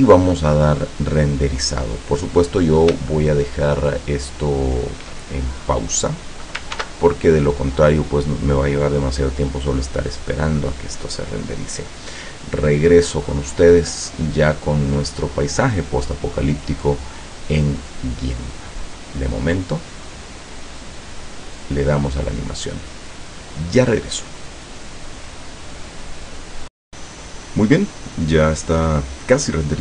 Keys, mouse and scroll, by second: 3.1-5.2 shift+middle drag, 6.8 ctrl+s, 6.9 ctrl+click, 21.3 click, 26.9 click.